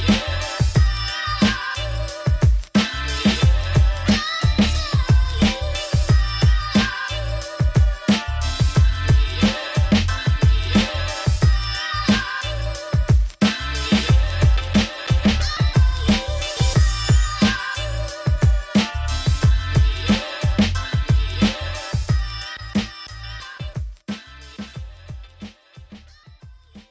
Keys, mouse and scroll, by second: 1.5-3.4 shift+drag, 3.4 click, 4.7 click, 5.3 click, 5.7 click, 6.6 right click, 7.2 click, 8.1-9.3 drag, 9.4 click, 9.6 middle click, 10.5 Tab, 11.3-12.6 middle drag, 13.4 Tab, 13.9 shift+d, 14.2 Tab, 15.5 ctrl+r, 18.1 middle click, 18.7 ctrl+e, 19.2 ctrl+r, 21.8 middle click, 22.1 ctrl+r, 23.0 s, 25.4-26.7 middle drag.